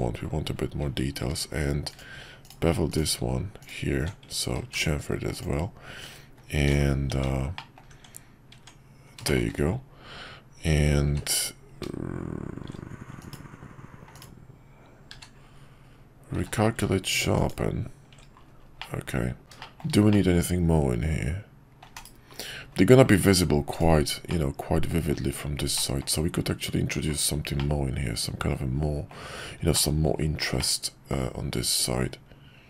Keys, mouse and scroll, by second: 4.6 ctrl+b, 7.1 Tab, 7.7 middle click, 9.2 shift+middle drag, 11.0 q, 14.1 click, 15.1 q, 18.8-19.4 middle drag, 19.4 Tab, 19.6 shift+middle click, 20.1-21.8 middle drag, 21.9 /, 24.3-25.1 middle drag, 25.7 middle click, 27.5-29.1 middle drag, 29.7 middle click, 30.6-32.6 middle drag.